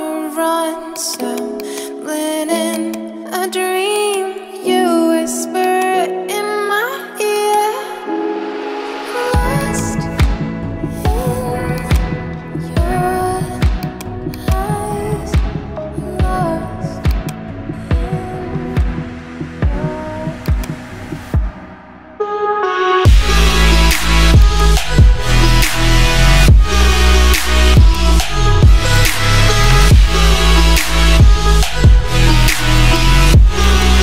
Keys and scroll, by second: 26.1 alt+BackSpace, 29.4 space, 30.6 [.